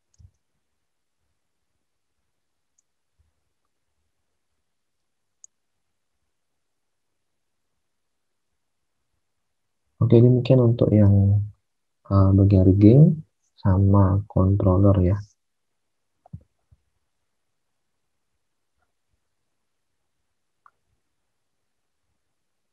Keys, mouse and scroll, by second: 0.1 alt+Tab, 8.4 ctrl+z.